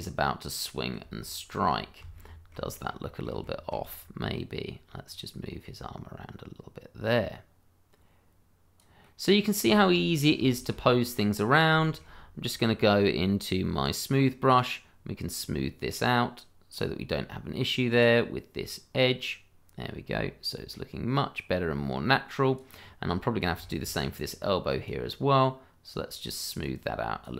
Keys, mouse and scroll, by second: 0.2 middle click, 1.3 shift+middle click, 1.9 middle click, 2.3 shift+middle click, 2.8 middle click, 3.6 shift+middle click, 5.1 click, 9.1 middle click, 10.0-10.5 scroll up 1, 10.5 shift+middle click, 10.8 shift+scroll up 1, 11.1 middle click, 11.4-11.8 scroll up 1, 11.8 shift+middle click, 12.1-13.8 shift+scroll up 1, 13.8 click, 16.4 click, 22.8 scroll down 1, 23.1 middle click, 23.6 shift+middle click, 24.1 middle click, 24.9 click.